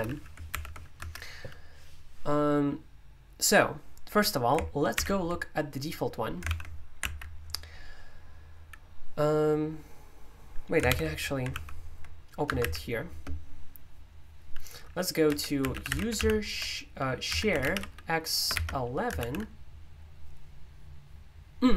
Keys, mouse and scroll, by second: 0.0 h, 0.5 ctrl+u, 1.0 Escape, 4.9 super+o, 6.4 super+l, 7.0 alt+d, 10.8 super+u, 11.5 super+l, 12.4 Return, 12.6-13.0 typing, 15.0-19.1 typing.